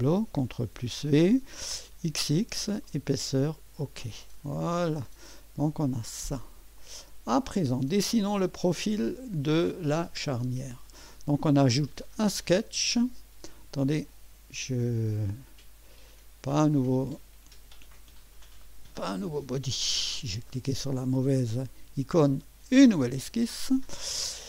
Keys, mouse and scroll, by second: 0.5 ctrl+v, 1.9-3.4 typing, 2.9 click, 3.5 click, 6.1 click, 6.8-7.7 drag, 8.0-8.5 drag, 9.6-10.2 drag, 10.2-11.4 typing, 10.4-11.0 drag, 12.3 click, 17.7 click, 19.3 Delete, 19.8 click, 22.9 click.